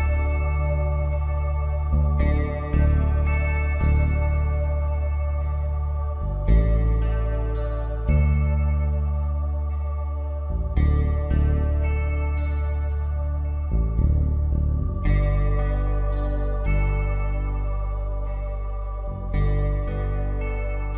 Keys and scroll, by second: 3.1 Down, 3.6 Down, 6.3 Down, 13.7-17.0 typing.